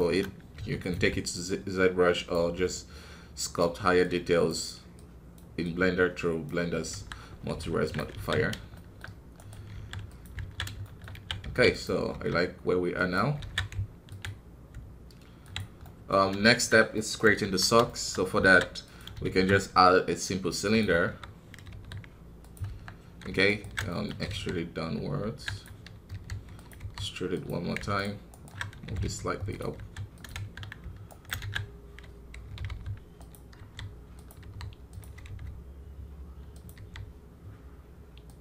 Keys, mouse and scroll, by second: 3.8-6.9 drag, 6.9 KP_1, 7.2-7.6 scroll down 4, 7.6 ctrl+Tab, 8.3 scroll down 1, 8.7 shift+middle click, 9.3 right click, 9.7 ctrl+a, 10.8 shift+middle click, 11.1 a, 15.8 middle click, 16.5 shift+scroll down 2, 16.9 middle click, 17.4 KP_1, 17.8 shift+middle click, 18.3 alt+a, 18.8 click, 19.2 shift+a, 21.0 KP_3, 21.3 scroll up 2, 21.6 g, 23.4 alt+right click, 23.8 shift+middle click, 24.2 e, 27.9 alt+right click, 28.8 g, 31.0 alt+right click, 31.4 shift+z.